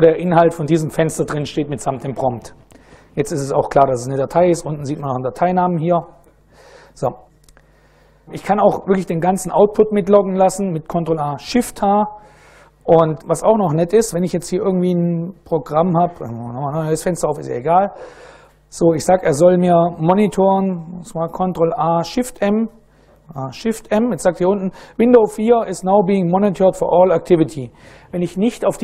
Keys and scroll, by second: 2.4 Up, 3.1 Up, 13.1 super+Right, 15.9 ctrl+a, 16.1 ctrl+c, 22.0 super+Right, 22.7 ctrl+a, 23.5 shift+m.